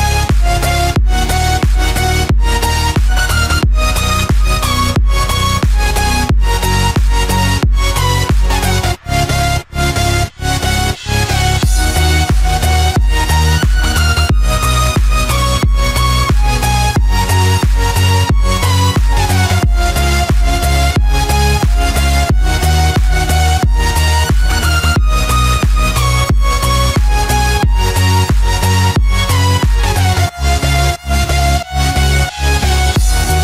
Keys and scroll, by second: 3.5 ctrl+=, 11.4 ctrl+=, 11.6 ctrl+space, 13.7 ctrl+-, 16.5 ctrl+=, 17.1 ctrl+space, 24.8 ctrl+z.